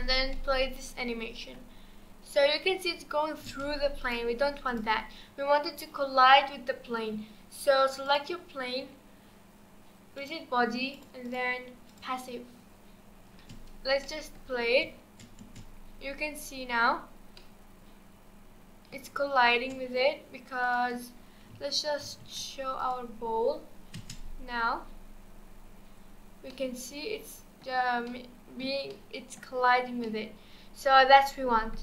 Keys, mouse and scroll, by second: 0.2 scroll down 2, 0.3-3.3 middle drag, 3.5 space, 4.0-4.8 drag, 5.0-5.6 scroll up 2, 5.6-6.7 scroll down 2, 8.0 click, 10.2-11.0 drag, 11.2-12.8 drag, 12.8-14.0 scroll up 1, 14.0-14.6 middle drag, 14.6 space, 14.8 space, 15.5 space, 17.4-19.5 middle drag, 19.5 space, 20.6-22.0 drag, 22.0 alt+h, 22.8 click, 23.5-23.9 scroll up 4, 23.9 space, 24.2-26.5 scroll down 4, 26.5-31.8 middle drag.